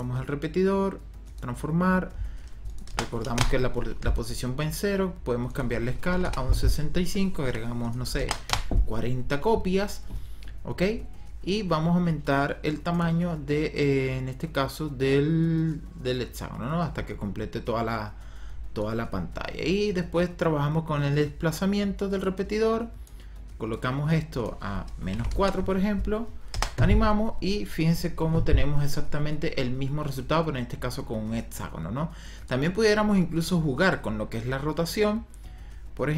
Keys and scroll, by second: 2.8 KP_0, 3.3 Return, 5.8 KP_6, 6.1 KP_5, 6.2 Return, 8.0 KP_4, 8.3 KP_0, 8.4 Return, 24.9 KP_Subtract, 25.2 KP_4, 25.3 Return, 26.4 KP_0.